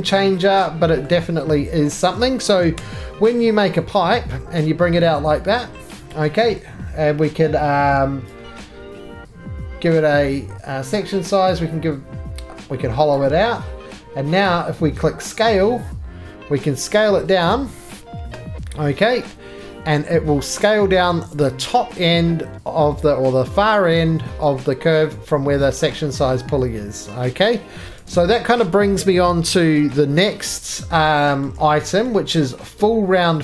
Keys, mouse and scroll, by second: 0.5 scroll, 1.0 middle click, 2.7 p, 3.2 scroll, 6.0 click, 10.9 click, 13.1 click, 14.5 click, 21.3 click, 24.0-25.3 scroll, 25.5-27.9 scroll, 27.9 right click, 27.9 shift+click, 27.9 2, 28.0 click, 29.7-30.4 scroll, 30.4-31.4 scroll, 31.4 middle click, 32.0 shift+middle click.